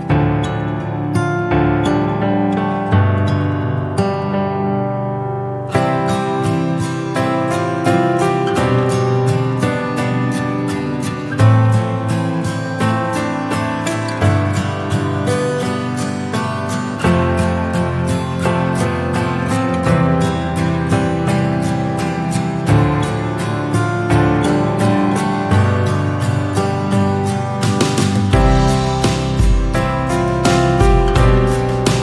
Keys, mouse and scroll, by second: 0.9 r, 1.8 scroll down 2, 3.1 middle click, 3.6-4.7 middle drag, 4.7 KP_3, 5.4 scroll up 1, 5.9 scroll down 1, 6.7 KP_7, 7.1 scroll up 1, 8.1-9.5 shift+middle drag, 9.5 s, 11.5 shift+right click, 12.2 s, 15.5-18.0 drag, 18.0-18.3 scroll down 5, 18.3 scroll up 3, 18.6 Tab, 19.6 /, 20.1 click, 21.3 Tab, 21.8 ctrl+a, 23.0 click, 23.7 ctrl+r, 24.8 scroll up 1, 25.3 Tab, 25.6 scroll down 2, 26.5 ctrl+r.